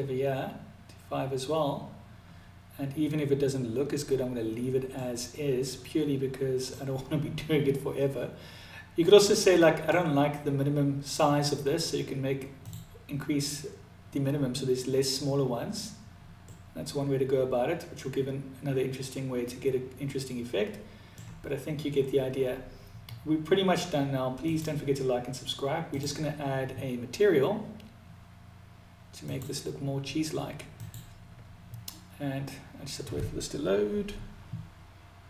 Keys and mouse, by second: 4.4-6.1 middle drag, 8.6 middle click, 12.0-13.9 drag, 15.8-20.5 middle drag, 23.8 click, 25.2-35.1 drag.